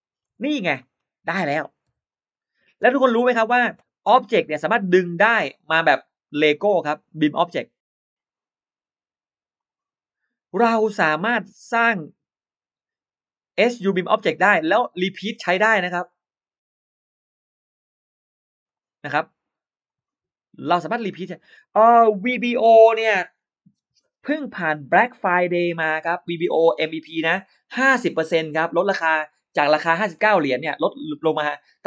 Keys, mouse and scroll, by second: 0.1 Escape, 0.3 scroll down 1, 0.6 Escape, 0.6 scroll up 1, 0.6 middle click, 0.7 Escape, 0.8 scroll down 1, 1.1-1.4 scroll up 1, 1.2 middle click, 1.7 e, 1.9 click, 2.6 space, 2.6 e, 2.7-3.0 scroll up 1, 4.5 click, 6.7 click, 7.1 middle click, 8.0 click, 9.4 click, 10.3 click, 11.7 click, 13.4 click, 14.1 click, 15.9 click, 18.5 click, 19.7 click, 20.6 click.